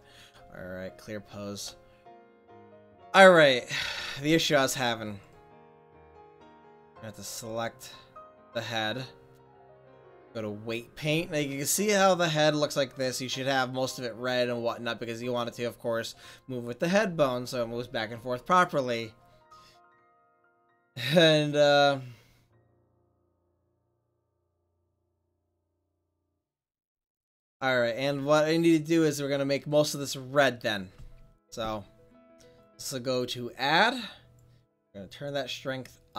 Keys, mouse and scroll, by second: 2.7-5.5 middle drag, 5.5-7.0 right drag, 7.0 middle click, 7.4 middle click, 7.7-8.6 right drag, 8.6 middle click, 10.8-11.3 middle drag.